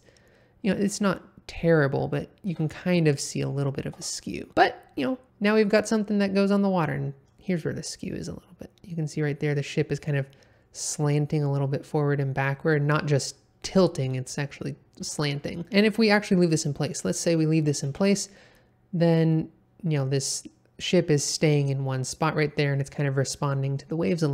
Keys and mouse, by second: 2.4 Escape, 2.9-3.6 middle drag, 3.8 g, 3.9 x, 15.0 Escape, 15.6 middle click, 17.8 space, 24.1 middle click.